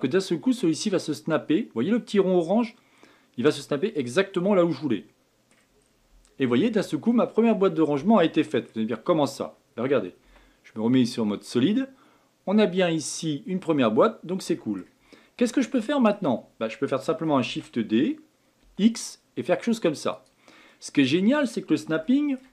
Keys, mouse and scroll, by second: 4.5-5.8 middle drag, 5.8 scroll down 3, 6.6 Tab, 7.1-9.0 middle drag, 9.0 scroll up 2, 10.2 z, 11.5-14.5 middle drag, 15.1 scroll down 2, 15.5-17.4 shift+middle drag, 17.4 shift+d, 20.7-22.5 middle drag.